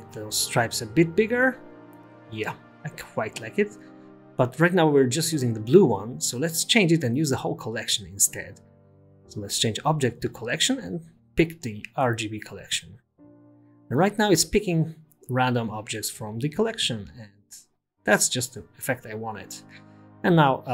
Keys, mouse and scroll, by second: 2.5 click, 2.8-3.3 scroll up 6, 3.3 space, 4.6 space, 5.0-5.4 scroll down 6, 6.3-6.7 scroll up 2, 6.7-7.5 scroll down 1, 7.5-7.9 scroll down 1, 8.5 click, 10.2 click, 13.8 click, 15.6 scroll up 1, 16.0 space, 17.8 space, 18.9-19.9 scroll up 4, 19.9-20.4 scroll up 4.